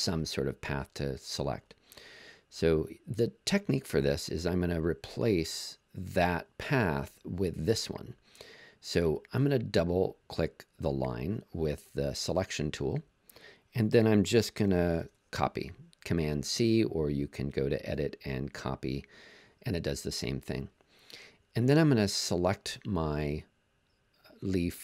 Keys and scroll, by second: 14.9 super+c.